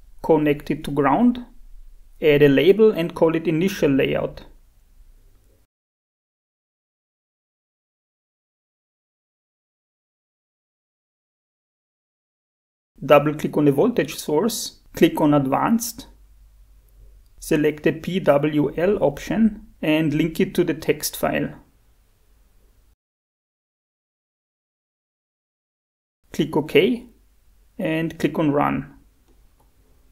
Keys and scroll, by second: 4.0-7.0 typing, 8.7 Escape, 9.3 F7, 10.9 Escape.